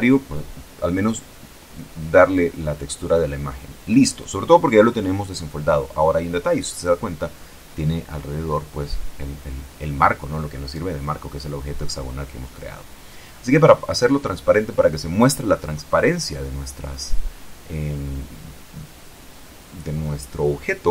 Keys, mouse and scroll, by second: 0.4 click, 1.7 click, 3.3 click, 8.3 ctrl+Left, 10.9 click, 16.8 right click, 18.3-19.4 shift+middle drag.